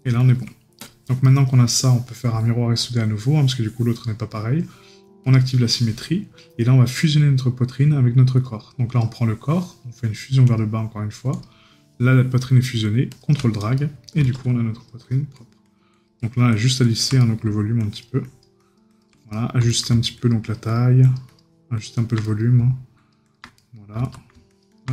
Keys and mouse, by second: 1.2 right click, 13.8 right click, 17.2 right click, 19.3 right click, 22.2 right click, 23.6 right click.